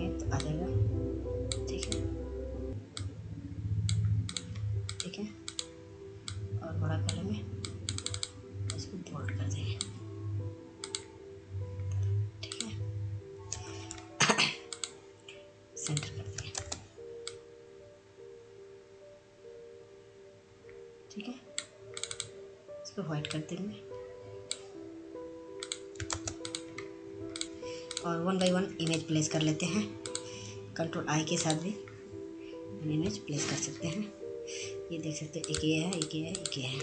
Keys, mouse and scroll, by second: 12.4 ctrl+a, 13.5 click, 15.4 ctrl+space, 16.3-24.3 drag, 24.8 ctrl+space, 25.1 click, 25.5 scroll down 1, 26.1 click, 26.4-26.8 scroll down 1, 26.9 F2, 27.3 click, 33.5-36.8 drag.